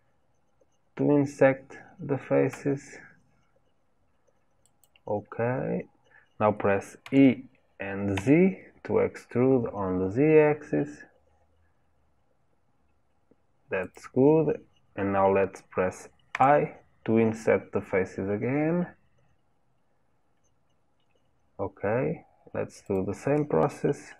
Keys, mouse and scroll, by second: 5.5-7.0 scroll up 1, 7.0 e.